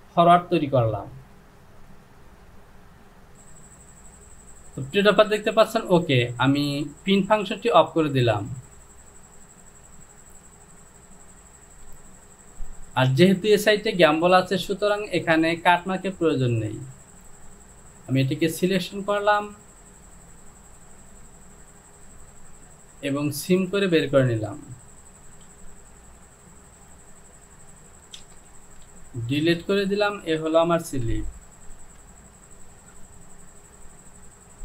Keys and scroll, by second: 12.0 Home, 25.6 j, 28.2 shift+z, 28.8 shift+z, 30.9 Home, 31.8 s.